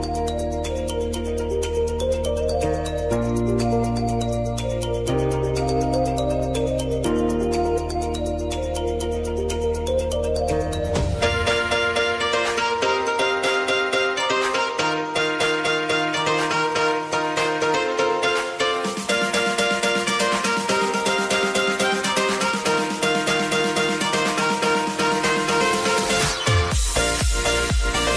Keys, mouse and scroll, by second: 0.7 shift+click, 1.1 u, 1.7 click, 2.0 space, 4.0 click, 4.9 space, 5.9 click, 6.2 [, 6.7 space, 8.8 space, 9.7 click, 11.1 space, 13.3 space, 14.9 click, 15.3 u, 16.3 click.